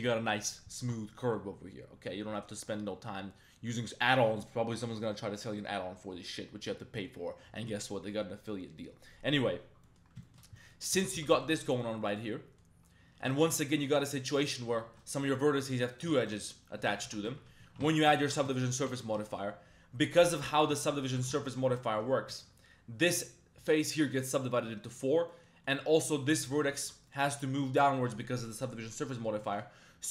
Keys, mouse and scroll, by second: 9.8 middle click, 10.2 shift+middle click, 10.6 middle click, 10.9 e, 11.1 g, 11.3 z, 12.3 click, 13.3 shift+click, 13.5 1, 14.0 right click, 14.6 2, 14.9 1, 15.0 right click, 15.6 2, 15.9 right click, 16.9 shift+middle click, 17.1 Tab, 17.4 ctrl+1, 17.6 ctrl+2, 18.2 ctrl+3, 18.5 shift+middle drag, 18.9 Tab, 19.0 middle click, 19.3 shift+middle click, 20.7 ctrl+1, 21.2 Tab, 21.4 ctrl+1, 21.9 Tab, 22.3 shift+middle click, 24.7 shift+middle click, 25.0 middle click, 25.3 middle click, 25.6 middle click, 26.2 right click, 26.7 shift+middle click, 27.1 middle click, 27.3 Tab, 27.9 middle click, 29.1 middle click, 29.4 Tab, 29.5 middle click.